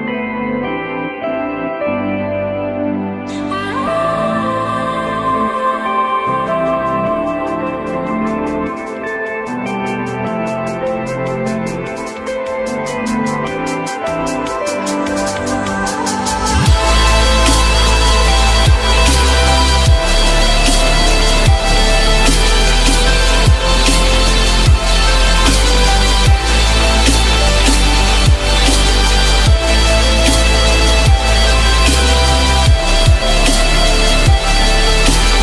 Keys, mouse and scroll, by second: 20.5 shift+click, 21.8 Delete, 25.8 ctrl+click, 27.0 r, 28.3 shift+click.